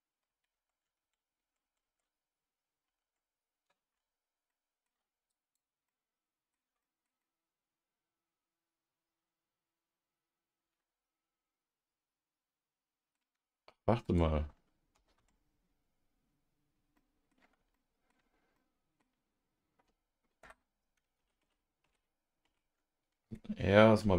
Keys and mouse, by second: 1.6 shift+Tab, 5.9 alt+middle click, 6.8 middle click, 7.2-13.1 middle drag, 14.0 click, 14.9-20.6 middle drag, 21.2 ctrl+z, 21.4 ctrl+z, 22.4 ctrl+z.